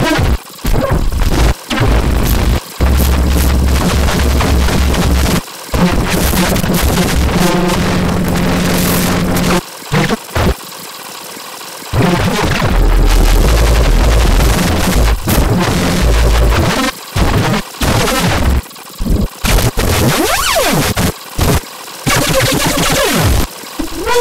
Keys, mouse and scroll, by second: 0.5 click, 0.6-1.5 drag, 2.7 click, 13.4-16.9 drag, 17.0 click, 17.1 click, 17.7 click, 18.7 click, 18.9 click, 19.5 click, 19.7 click, 20.0 scroll up 2, 20.9 click, 21.1 click, 21.2 click, 21.3 click, 21.6 click, 23.0 scroll down 2, 23.6 click, 23.8 click.